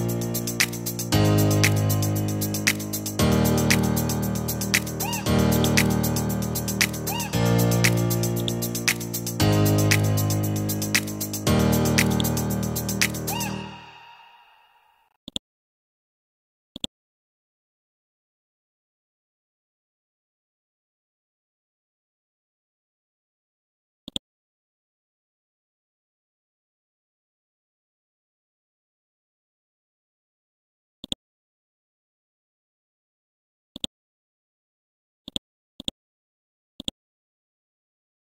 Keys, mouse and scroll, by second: 0.1 scroll down 1, 1.1-1.4 scroll up 1, 2.7 scroll down 1, 3.7-4.2 scroll up 1, 4.8-5.2 scroll down 1, 10.5 Left, 10.8-11.2 typing, 11.3 Left, 11.4 Left, 12.1 click, 15.8-16.8 scroll up 1, 16.8-24.1 drag, 24.1 right click, 27.2 Down, 27.4 Down, 27.6 typing, 31.0 click, 31.4-32.1 scroll down 1, 32.1 scroll up 1, 33.7 ctrl+click, 34.3-35.3 scroll up 1, 35.3 click, 36.8 ctrl+click.